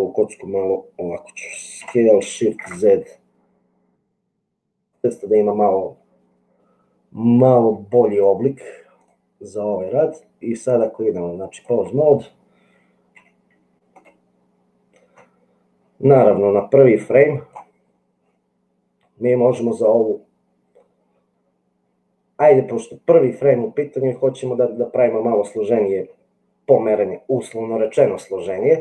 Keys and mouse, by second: 2.0 s, 10.8 click, 13.2 g, 17.0 click.